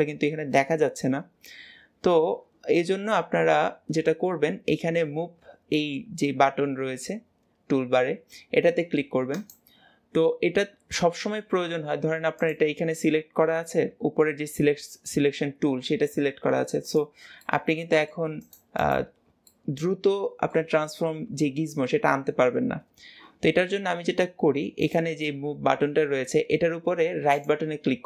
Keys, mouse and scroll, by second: 9.2-15.3 drag, 16.7 click, 17.3 middle click, 18.3 click, 18.7 click, 19.3-22.5 middle drag, 24.7-27.3 drag, 27.3-28.0 right drag.